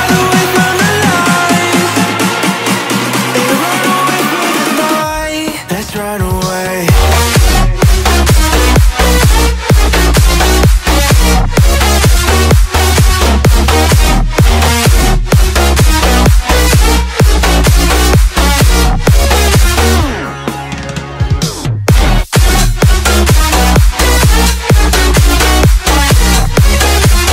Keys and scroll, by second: 0.0 Up, 2.5 ctrl+g, 5.3 Return, 13.1 space, 14.9-16.7 typing, 21.9-24.2 typing.